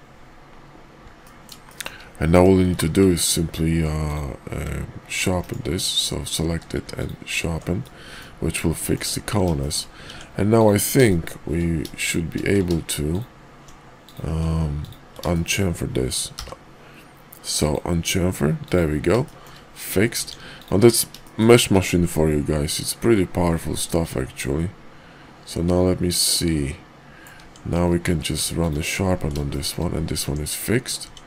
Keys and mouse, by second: 1.2 middle drag, 1.7 shift+middle drag, 2.3 Tab, 2.7 q, 3.9 click, 5.4 right drag, 5.8 click, 6.4 q, 7.8-8.2 middle drag, 8.8 shift+middle drag, 9.5 shift+middle click, 10.1 Tab, 10.6 click, 11.0 shift+middle click, 13.9 click, 15.2 shift+click, 19.1 shift+click, 20.1 Tab, 20.6 click, 21.2 shift+click, 23.0-25.1 middle drag, 25.1-27.2 drag, 27.4 Tab, 27.9 q, 29.5 shift+middle click, 30.2 Tab, 31.0 Tab.